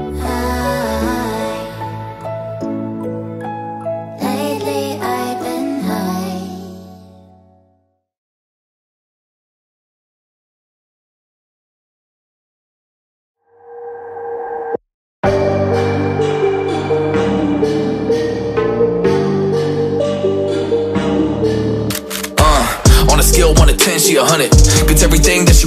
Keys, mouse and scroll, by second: 2.1-2.5 alt+scroll down 2, 2.5 alt+scroll up 1, 3.2 alt+scroll down 1, 5.1 alt+scroll down 1, 5.2 alt+scroll up 1, 6.1 alt+scroll up 1, 6.2 alt+scroll down 1, 8.7 alt+scroll up 1, 10.7 double click, 12.8 double click, 16.8 Delete, 18.3 double click, 19.2 double click, 23.8 double click.